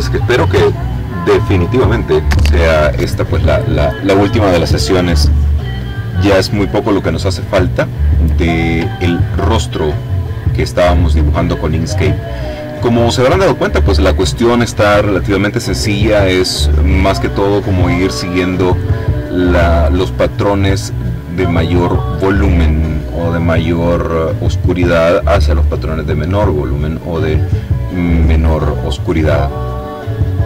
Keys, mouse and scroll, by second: 9.1-9.7 ctrl+scroll up 2, 10.7-11.4 ctrl+scroll down 2, 11.4-14.5 ctrl+drag.